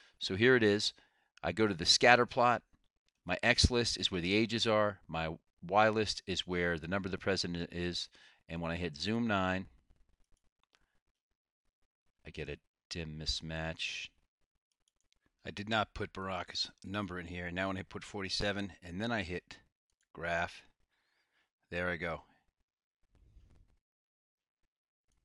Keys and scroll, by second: 10.5 9, 14.9 Delete, 16.2 4, 17.1 7.